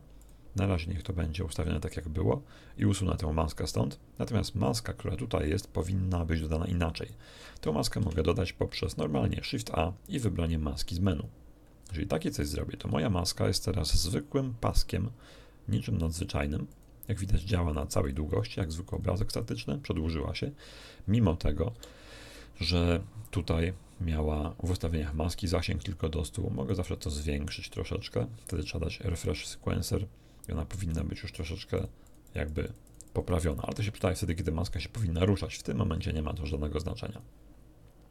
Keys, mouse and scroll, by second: 0.1 click, 1.0 click, 1.9 click, 3.7 click, 7.1 click, 7.8 shift+a, 11.0 click, 12.3 right click, 12.7 g, 14.6 click, 16.0 click, 16.7-17.9 drag, 18.0 click, 18.6 click, 21.7 n, 23.2 click, 24.3 click, 26.0 click, 27.2 click, 29.3 click, 30.9 right click, 31.7-33.7 drag, 37.1 click.